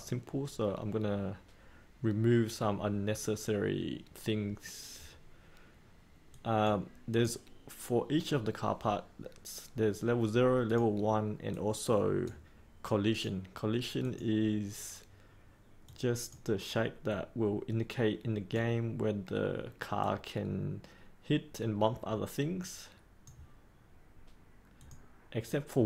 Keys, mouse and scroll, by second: 6.0 click, 11.9-24.1 drag.